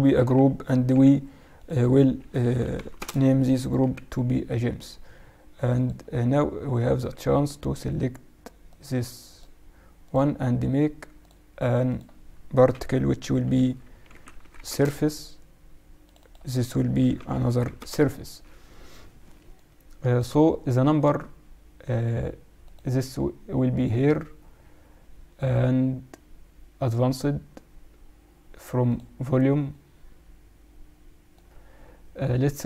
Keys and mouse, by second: 0.1 ctrl+g, 0.8 t, 1.6-3.2 drag, 3.7 t, 5.7-7.5 drag, 6.8-8.6 right drag, 8.6-13.7 drag, 16.0-18.0 drag, 19.5-21.3 drag, 22.6-24.3 drag, 26.8-28.7 drag, 28.8-32.6 drag.